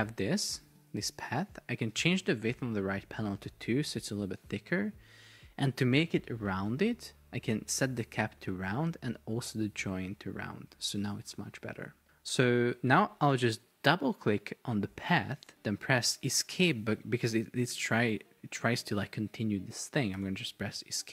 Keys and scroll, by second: 3.4 Return, 20.2 Escape.